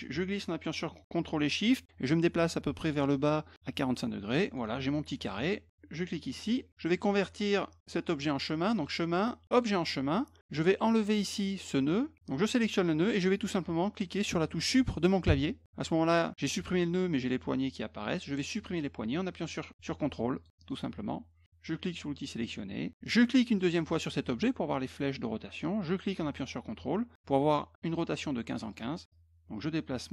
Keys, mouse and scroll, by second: 6.4 click, 8.7 click, 9.5 click, 12.4 click, 19.4 shift+click, 20.4 ctrl+click, 20.6 ctrl+click, 22.4 click, 23.5 click, 25.6-28.7 drag, 29.1-30.1 drag.